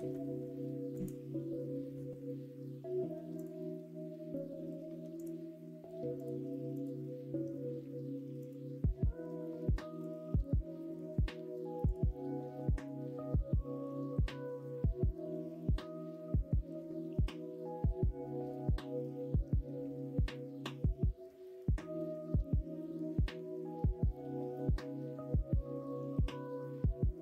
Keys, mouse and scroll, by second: 3.3 click, 6.1 click, 6.7 click, 8.3 click, 10.3 click, 11.9-16.0 drag, 22.9-26.1 drag.